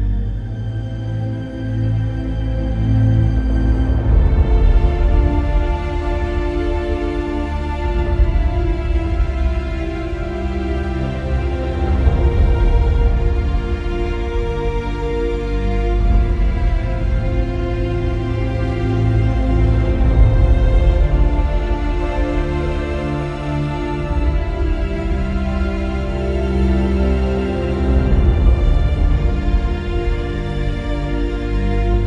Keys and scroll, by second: 15.2 Return, 20.3 Delete.